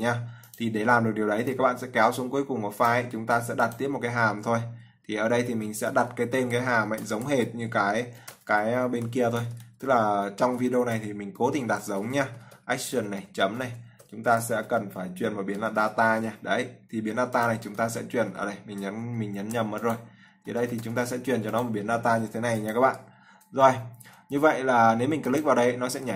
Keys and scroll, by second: 6.1 ctrl+v, 14.2 ctrl+v, 19.3 ctrl+z.